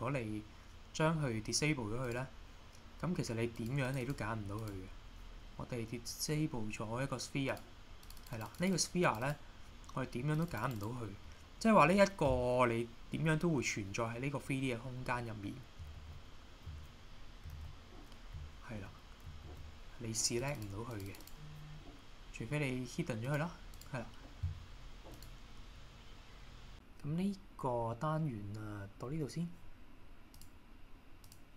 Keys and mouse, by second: 2.1 click, 3.6 click, 3.9 click, 4.0 drag, 7.5 click, 8.1 click, 8.6 click, 8.7 click, 9.2 click, 10.3 click, 16.0 alt+h, 17.5 shift+h, 19.5 alt+h, 20.2 click, 20.4 click, 20.5 click, 21.1 click, 23.2 click, 23.8 click, 25.2 click.